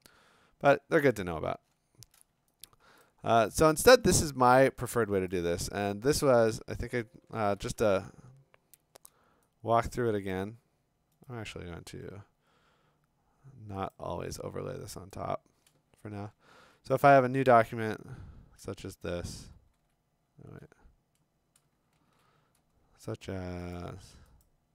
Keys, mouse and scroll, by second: 0.7-2.1 scroll, 3.0 click, 3.4 scroll, 4.1-4.6 scroll, 5.3 click, 5.6 f, 6.5 f, 6.6 click, 6.6 f, 7.6 ctrl+n, 8.7-10.3 Escape, 10.3 click, 11.3 right click, 13.9 click, 15.1 click, 16.6 ctrl+n, 18.0 Return, 19.6 ctrl+w, 22.1 ctrl+n, 23.8 click, 24.4 click.